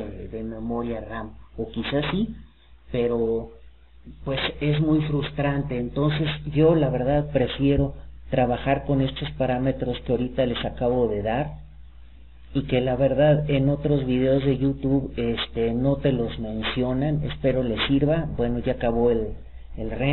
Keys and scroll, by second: 4.9 Escape.